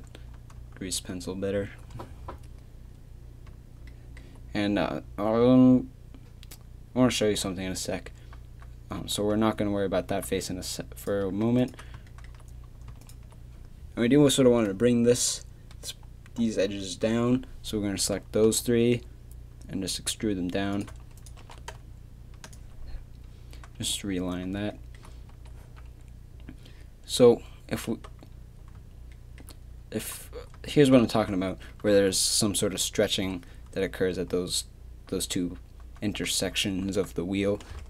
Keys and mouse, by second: 11.0-12.1 drag, 12.2 middle click, 12.8 middle click, 18.5 e, 21.4 g, 25.3 z, 25.6 a.